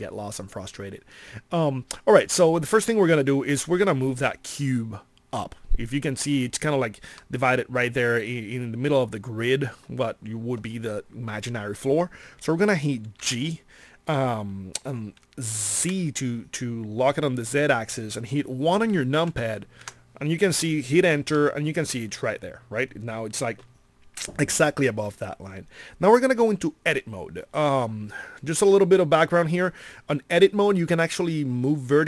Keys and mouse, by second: 13.1 g.